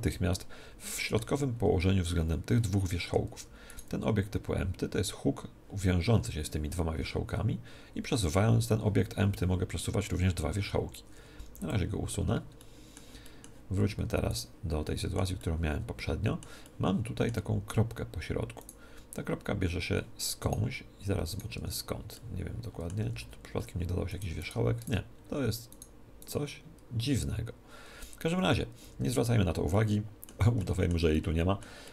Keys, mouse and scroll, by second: 0.3-3.6 middle drag, 3.4 Tab, 3.7 right click, 7.0 g, 11.5 x, 12.6-18.6 middle drag, 14.3 right click, 18.6-22.7 right drag, 21.6 Tab, 22.7-24.2 middle drag, 23.0 right click, 23.0 z, 24.2-28.2 right drag, 24.8 Tab, 28.1-29.6 middle drag, 28.4 Tab, 28.8 Tab, 29.7-31.9 middle drag.